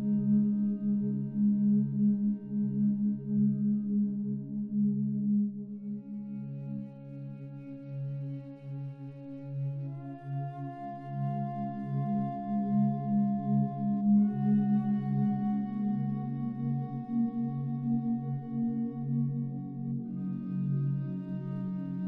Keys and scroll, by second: 3.3 ctrl+z, 5.0 ctrl+alt+z, 10.1 ctrl+z, 14.3 ctrl+z.